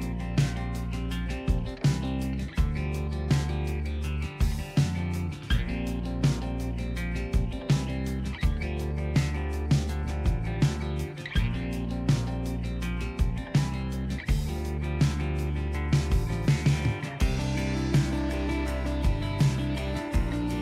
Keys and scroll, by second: 19.6 ctrl+z.